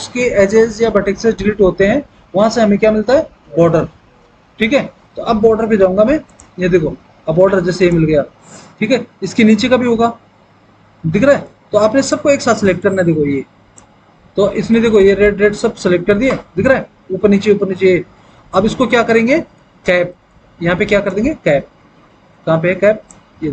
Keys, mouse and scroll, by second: 16.1 F3.